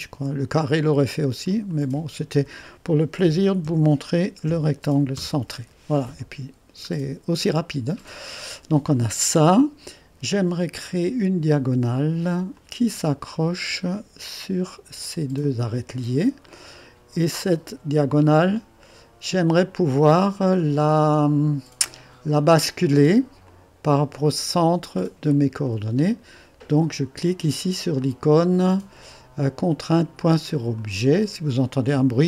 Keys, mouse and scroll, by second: 1.5 click, 3.2-5.1 typing, 6.8-7.4 scroll up 1, 7.4 middle click, 8.4 right click, 10.8-12.0 drag, 12.5-13.6 drag, 15.4 click, 16.4 click, 16.4-16.8 typing, 18.1-22.3 drag, 23.4 click, 25.3-28.4 drag, 30.7-31.8 drag.